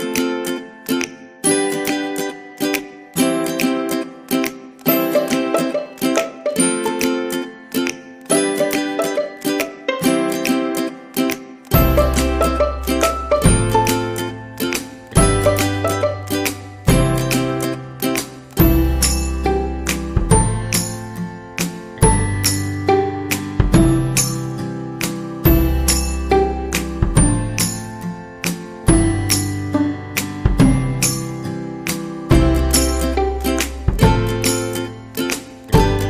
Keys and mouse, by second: 0.3 right click, 0.5 g, 1.4 alt+z, 1.8 KP_1, 2.6 alt+z, 3.1 shift+middle click, 3.4 alt+z, 3.9 ctrl+r, 5.3 KP_3, 6.2 shift+middle click, 7.0 alt+z, 8.0 right click, 8.3 c, 9.1 g, 10.7 c, 11.7 g, 13.0 right click, 13.2 c, 14.1 g, 15.2 right click, 15.4 g, 16.7-18.2 right drag, 18.4 g, 19.0 middle click, 19.8 alt+z, 20.1 shift+middle click, 21.1 right click, 21.4 g, 22.7 right click, 23.0 g, 23.8 right click, 27.2 g, 28.1 right click, 28.3 g, 29.9 middle click, 30.8 middle click, 32.9 middle click, 33.4 c, 34.9 KP_3, 35.6 shift+middle click.